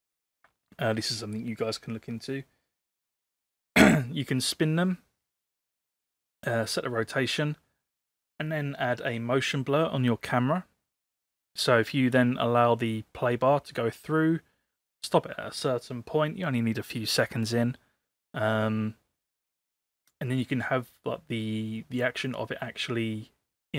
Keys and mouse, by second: 20.0 click.